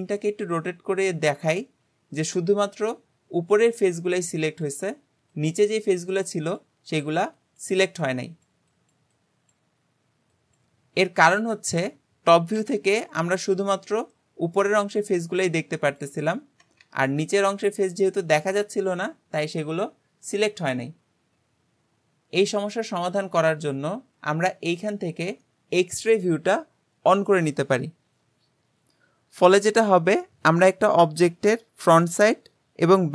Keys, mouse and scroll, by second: 12.6 KP_7, 17.1-20.2 middle drag, 27.2-30.2 drag, 30.2-33.1 middle drag.